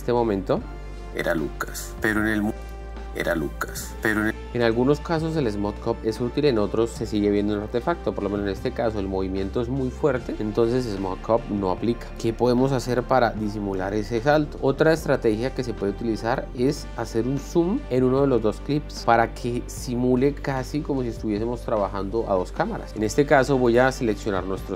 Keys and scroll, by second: 1.6 space.